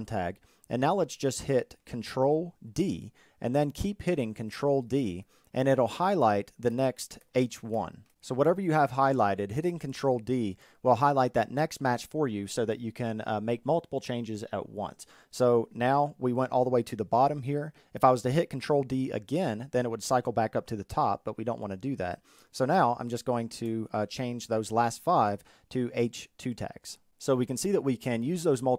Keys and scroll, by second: 1.8 ctrl+d, 5.9 ctrl+d.